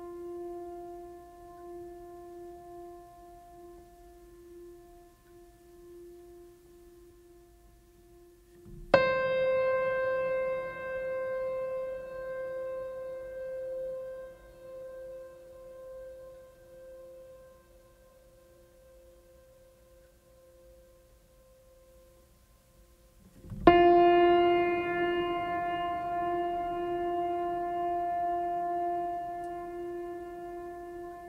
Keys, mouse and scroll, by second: 5.3 right click, 5.5 right click, 6.6 right click, 8.9 right click, 11.4 right click, 11.6 right click, 12.0 right click, 12.2 right click, 13.3 right click, 24.4 right click, 24.7 right click, 26.0 right click, 27.9 right click, 28.1 right click, 28.8 right click, 29.6 right click.